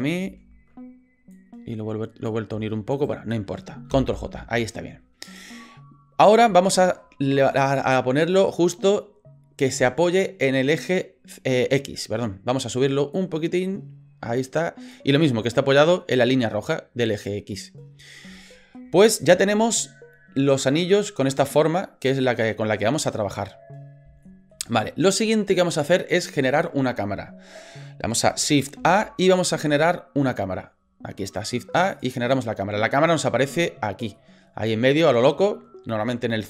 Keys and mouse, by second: 0.2 ctrl+z, 1.4 click, 2.9 shift+right click, 3.9 ctrl+j, 6.5 shift+middle click, 13.2-14.9 drag, 18.5 shift+middle click, 20.4-23.3 middle drag, 24.3 shift+middle click, 28.7 shift+a, 34.3 middle click.